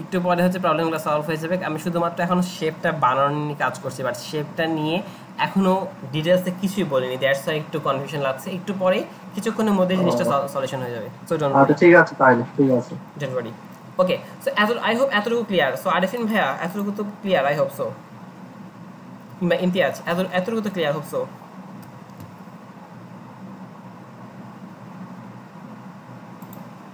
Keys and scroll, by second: 3.0 Right, 3.3 Right.